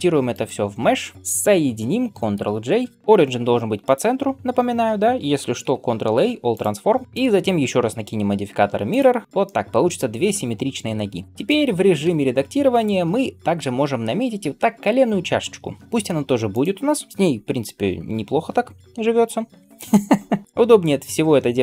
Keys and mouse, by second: 2.9 ctrl+j, 2.9-5.3 right drag, 5.7-7.0 right drag, 8.9-9.2 drag, 8.9-16.5 middle drag, 8.9-16.5 right drag, 11.9 Tab, 16.5 click, 17.1 l.